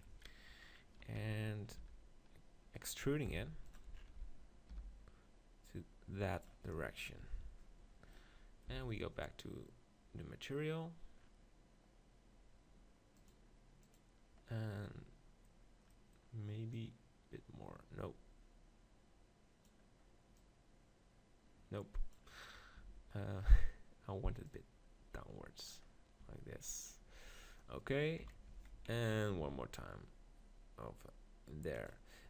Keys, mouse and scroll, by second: 1.2 z, 1.8 r, 2.9-4.7 right drag, 3.3 e, 3.9-6.0 middle drag, 4.7 g, 6.4-8.4 drag, 8.7 z, 14.0 click, 14.9-16.7 middle drag, 16.7-18.7 drag, 20.4-22.2 drag, 22.8 Tab, 24.5-25.5 drag, 26.3 Tab, 27.1 Tab, 28.2 KP_7, 28.5 Tab, 28.7 z, 29.4 e, 31.9 click.